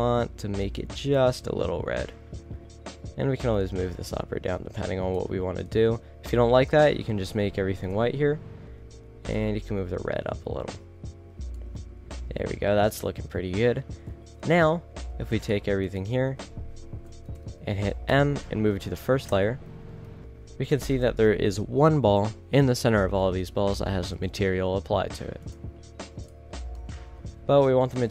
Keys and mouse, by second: 0.0 click, 8.1-8.6 middle drag, 9.6-10.7 middle drag, 12.4-13.5 middle drag, 14.7 shift+z, 15.3 a, 15.6-16.0 right drag, 17.3 a, 17.5 a, 18.2 m, 19.9 1, 20.3 a, 21.0 KP_0, 21.6 shift+z, 24.5 shift+z, 26.9 middle drag, 27.2 a, 27.6 a.